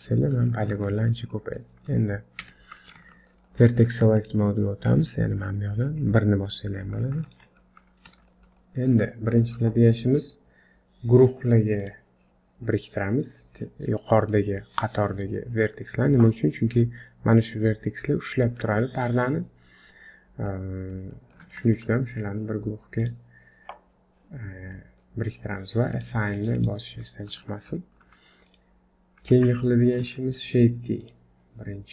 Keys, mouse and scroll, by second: 0.3 scroll up 4, 0.7 shift+middle click, 1.3 middle click, 2.4 1, 3.1 shift+middle click, 3.5 middle click, 4.2 click, 7.6 middle click, 8.3 shift+middle click, 8.6 middle click, 11.8 click, 14.0 middle click, 17.9-18.3 scroll down 3, 18.3 middle click, 18.8 shift+middle click, 20.5 middle click, 21.1 middle click, 21.5 shift+middle click, 22.1 scroll up 3, 23.0 click, 24.5 scroll down 1, 24.7 middle click, 25.9 click, 26.3 click, 26.5 click, 27.1 scroll up 2, 27.4 shift+middle click, 28.0 z, 28.9-29.5 scroll down 3, 29.3 Tab, 29.6 middle click, 30.2 shift+middle click, 31.0 click.